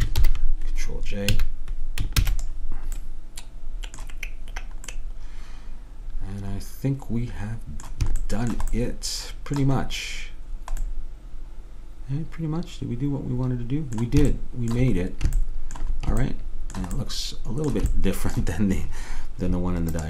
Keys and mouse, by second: 0.3 ctrl+j, 1.5 a, 2.3 ctrl+s, 8.3-13.4 middle drag, 14.4-20.0 middle drag.